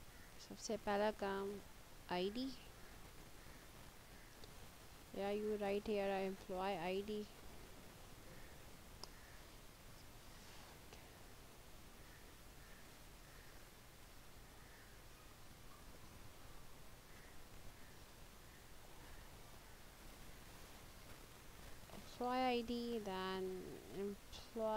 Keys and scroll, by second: 1.8 i, 1.9 d, 5.7 BackSpace, 6.6 e, 7.3 BackSpace, 15.8 e, 17.0-19.4 typing, 20.6 space, 21.0 i, 21.8 d, 23.4-24.7 typing.